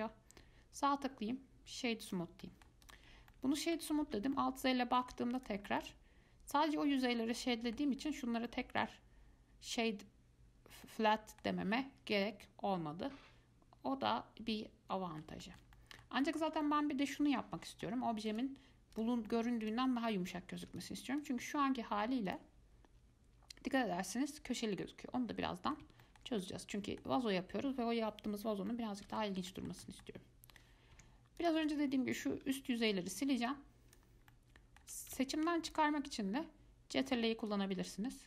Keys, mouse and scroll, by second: 0.1-2.6 right drag, 2.6-3.0 middle drag, 3.0 click, 3.3 scroll up 1, 3.5 middle click, 4.2 alt+z, 4.5 middle click, 5.3 Tab, 5.6 click, 5.9 scroll down 2, 6.0-8.2 middle drag, 8.2-8.6 scroll up 2, 8.7-15.5 middle drag, 15.6-18.5 shift+middle drag, 18.5 click, 19.2 click, 19.5-19.8 middle drag, 19.8 click, 20.8 ctrl+z, 21.0 click, 21.4 click, 22.5 click, 25.0-31.1 middle drag, 31.1 Tab, 31.6 click, 31.9 click, 33.0 click, 33.7 click, 34.5-35.5 middle drag, 35.5 ctrl+click, 36.6-37.7 middle drag, 37.7 ctrl+click.